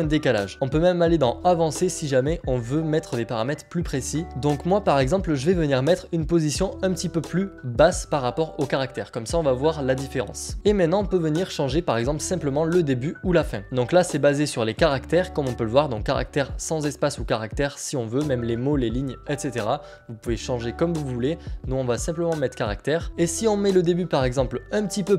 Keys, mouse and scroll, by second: 4.6 scroll down 1, 5.7-7.9 scroll down 1, 8.8 click, 9.1 scroll up 1, 10.5 click, 12.7-13.6 scroll, 14.7 click, 22.5 click, 23.1 click.